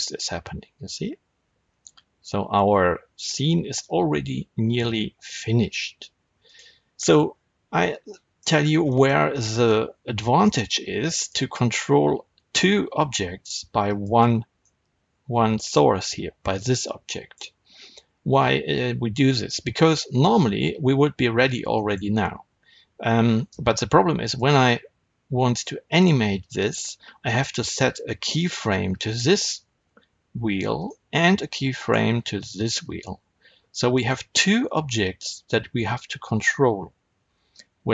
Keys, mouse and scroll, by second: 6.4 right click, 6.8-7.2 scroll down 1, 8.3-10.1 middle drag, 8.4 scroll up 1, 8.6 scroll down 1, 9.2 scroll down 1, 9.5 scroll up 1, 11.0 click, 13.7 click, 14.5-24.2 middle drag, 17.9-18.2 scroll down 2, 18.2-19.1 scroll up 2, 24.2 click, 28.2 r, 30.7 right click, 31.7 click, 32.6 r, 34.0 right click.